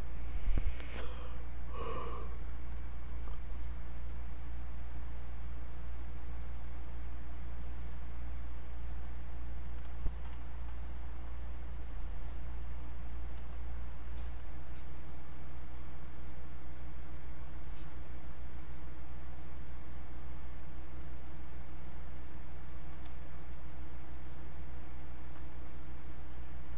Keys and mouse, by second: 9.3 click, 10.0-14.4 alt+drag, 14.6-24.2 drag.